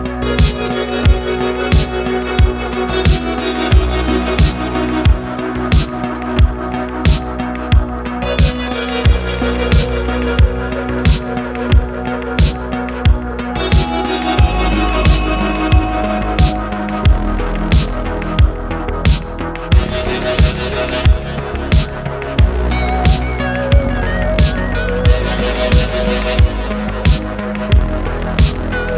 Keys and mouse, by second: 1.5-2.6 drag, 3.0 click, 4.4-7.1 drag, 7.9 click, 8.9-11.4 drag, 11.9 middle click, 13.5-15.1 drag, 17.2 middle click, 20.2-21.0 middle drag, 22.2-22.8 middle drag, 23.8-25.3 drag, 27.3 middle click.